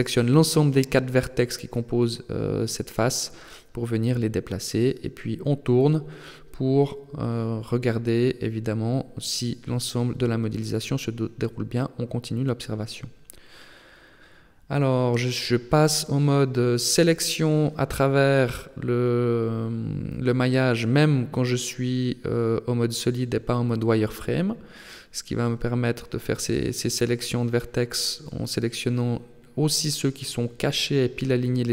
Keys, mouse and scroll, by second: 3.1 middle click, 5.5 middle click, 8.8 middle click, 9.7 KP_3, 10.5-11.1 scroll up 2, 11.1 a, 11.8 b, 13.5 g, 17.2 click, 17.8 middle click, 20.9 alt+right click, 21.4 alt+right click, 21.9 alt+right click, 22.3 alt+right click, 23.3 alt+shift+right click, 24.5 KP_3, 25.7 g, 27.3 r, 30.9 a, 31.2 b.